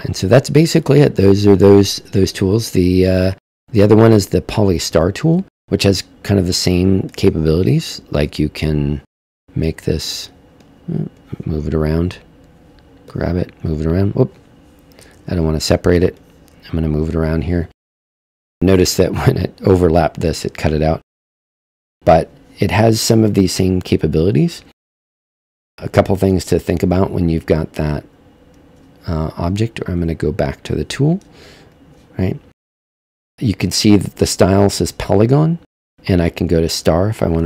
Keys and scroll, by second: 15.1 super+z.